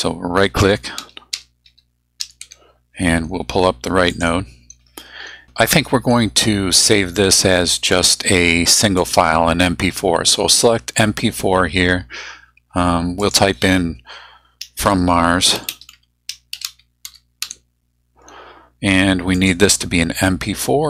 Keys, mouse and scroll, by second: 0.7-2.9 typing, 4.1 click, 7.9 click, 9.0 click, 13.2 click, 14.8-17.9 typing, 19.3 click.